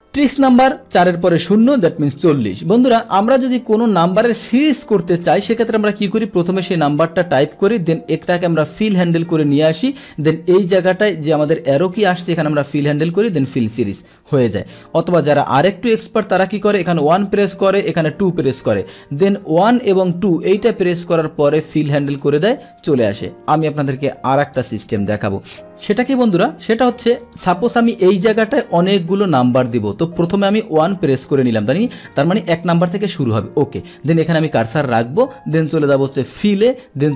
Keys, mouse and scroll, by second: 3.1 click, 5.9 click, 6.7 click, 7.9-9.5 drag, 12.2 click, 13.4 click, 14.4 click, 15.2 click, 17.5 Down, 19.4 click, 21.1-22.2 drag, 24.4 click, 27.2 click, 28.4 click, 29.5 click, 30.3 click, 31.1 click, 31.7 click, 36.3 click.